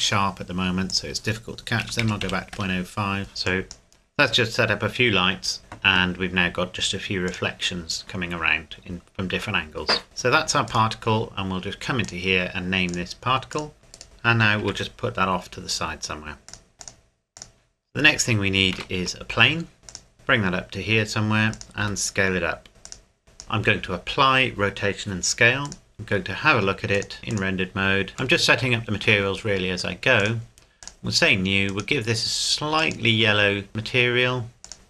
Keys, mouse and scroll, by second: 0.9 click, 1.8 KP_Decimal, 2.0 KP_0, 2.2 KP_5, 2.5 KP_Enter, 3.3 scroll down 1, 3.4 click, 4.6-5.6 scroll down 1, 7.2 click, 10.7 right click, 12.0 click, 13.8 Return, 13.9 right click, 14.0-14.6 scroll down 1, 14.6 g, 16.5 click, 18.8 shift+a, 19.9 click, 20.1 g, 21.5 click, 21.8 s, 22.8 click, 24.5 ctrl+a, 25.6 click, 25.9 middle click, 26.9 click, 28.4 shift+middle click, 30.2 click.